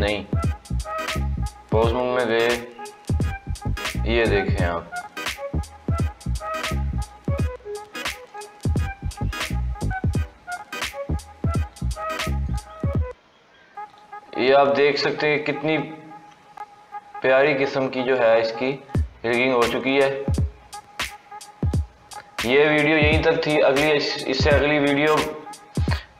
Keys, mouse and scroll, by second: 1.6 click, 2.2 scroll up 2, 2.8 g, 8.2 click, 9.2 r, 12.3 click, 12.7 r, 14.8 click, 16.2 g, 19.6 click, 20.0 r, 23.3-23.9 scroll down 1.